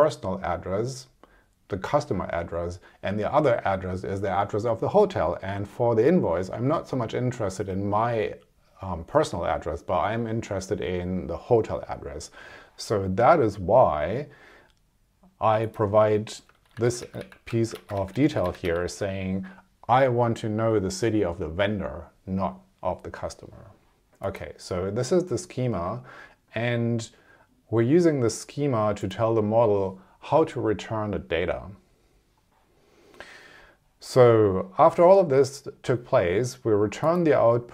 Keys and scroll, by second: 16.6 alt+Left, 17.8 shift+super+Right, 18.1 shift+Left, 18.7 shift+Right.